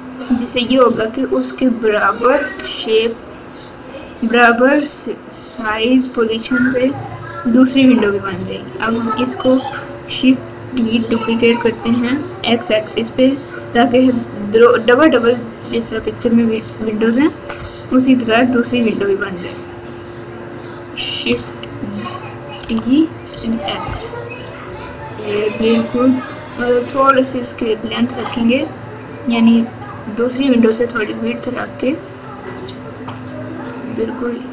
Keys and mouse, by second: 4.4 click, 22.6 shift+d.